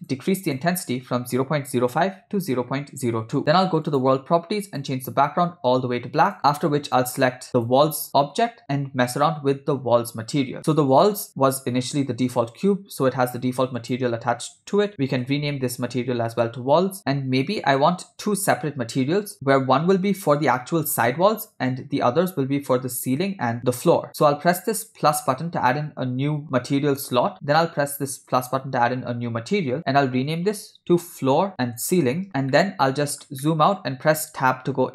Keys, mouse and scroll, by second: 0.0-3.4 drag, 3.9 click, 4.7 click, 6.3 click, 7.5-7.9 drag, 10.9 click, 13.8-16.5 drag, 15.7 l, 25.2 click, 28.3 click, 29.8-32.3 drag, 31.5 o, 31.5 BackSpace, 32.3 KP_0, 32.6-33.3 ctrl+middle drag, 33.5-34.1 middle drag, 34.4 Tab.